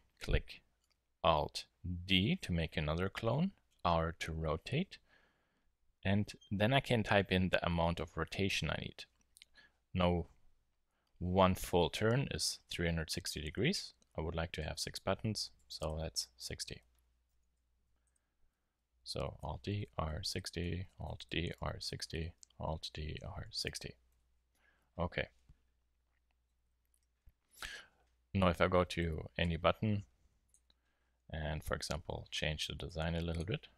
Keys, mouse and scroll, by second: 2.0 alt+d, 17.3 alt+d, 19.4 alt+d, 21.0 alt+d, 22.8 alt+d, 25.3-26.3 middle drag, 27.1-30.4 middle drag, 29.0 Tab, 30.4-31.9 drag, 31.9 g, 32.8-33.7 drag.